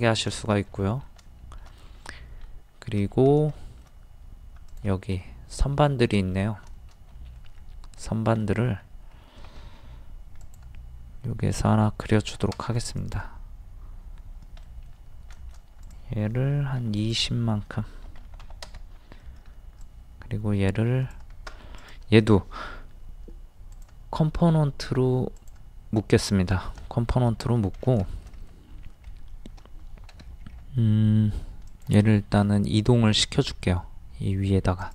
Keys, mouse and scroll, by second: 1.2 shift+middle click, 2.9-3.3 scroll down 1, 3.6 shift+middle click, 4.7 click, 5.9 middle click, 6.8 shift+middle click, 7.7-8.0 scroll up 1, 8.4 middle click, 8.8-9.1 scroll up 1, 9.5 r, 10.4 click, 14.6 middle click, 15.8 click, 18.1 KP_2, 19.8 click, 21.8 right click, 23.7 click, 26.5-26.8 scroll down 1, 27.2 middle click, 27.6 scroll down 1, 28.1 shift+middle click, 28.4-28.7 scroll up 1, 30.1 m, 30.5-30.9 scroll up 1, 31.7 click, 32.0 scroll down 1, 32.2 scroll up 1, 32.4-33.2 scroll down 1, 33.2-33.5 scroll up 1, 34.8 click.